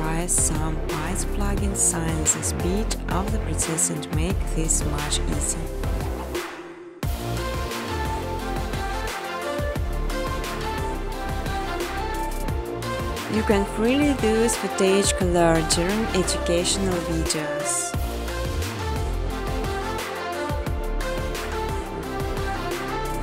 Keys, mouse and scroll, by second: 0.1 Tab, 0.4 Tab, 0.4-10.9 typing, 4.2 Tab, 7.5 Tab, 7.7 Tab, 12.5 Return, 13.1-13.8 typing, 17.9 click, 18.5 typing, 18.9 click, 20.1 alt+click, 20.2-23.2 typing.